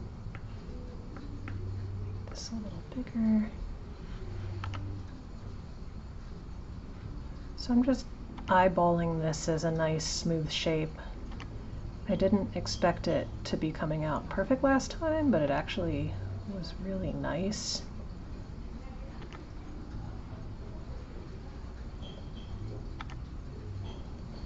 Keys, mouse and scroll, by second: 0.4 shift+middle click, 0.9 scroll up 1, 1.2 shift+middle click, 1.5 shift+middle click, 1.7-3.5 scroll up 2, 3.5 click, 7.7 click, 8.3 g, 10.7 click, 14.6 click, 18.6 click, 22.5 click.